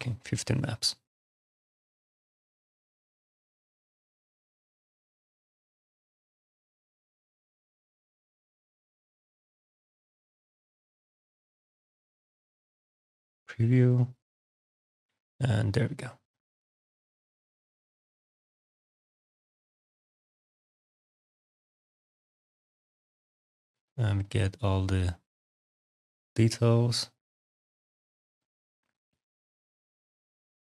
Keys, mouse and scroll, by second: 12.9 click, 14.9 alt+click, 16.1 alt+middle click, 16.6 alt+click, 19.3 click, 20.1 click, 21.6 alt+click, 22.2 alt+click, 23.5 alt+middle click, 23.6 click, 23.9 right click, 24.1 click, 25.5 click, 26.5 alt+click, 26.8 alt+right click, 27.5 right click, 28.0 middle click, 28.3 right click, 28.8 click, 29.6 click, 29.9 alt+click, 30.5 alt+click.